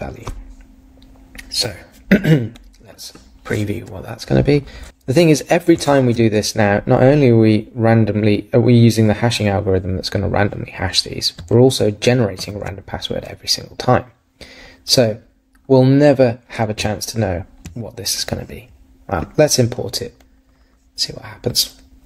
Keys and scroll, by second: 5.8 super+r, 12.4 super+r.